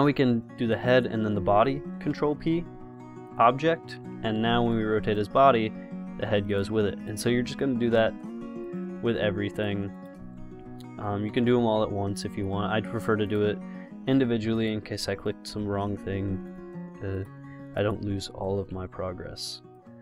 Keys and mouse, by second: 2.2 ctrl+p, 4.2 r, 5.9 ctrl+z, 6.7-7.7 drag, 8.1 ctrl+p, 9.8-13.3 drag, 11.6 ctrl+p, 13.6-14.8 drag, 15.8 ctrl+p, 19.0 ctrl+p.